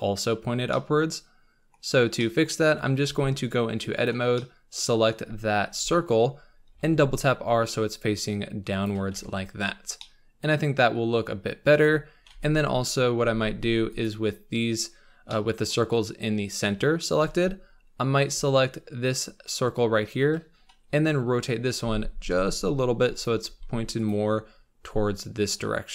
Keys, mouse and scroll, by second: 0.4-0.7 scroll down 2, 0.7-1.8 middle drag, 1.8-2.2 scroll up 3, 2.2 middle click, 3.3 Tab, 4.1 click, 4.4-5.7 middle drag, 5.7 KP_7, 6.7 r, 9.4 Tab, 9.7 scroll down 5, 10.0-11.0 middle drag, 11.0-11.8 scroll up 3, 11.8 KP_7, 12.5 Tab, 12.8-13.5 scroll up 4, 13.5 Tab, 14.1 click, 15.3-17.4 middle drag, 17.4 Tab, 20.2 l, 21.3 KP_7, 22.3 r, 23.4 g, 24.3-25.0 scroll down 9, 25.6-25.9 scroll down 4.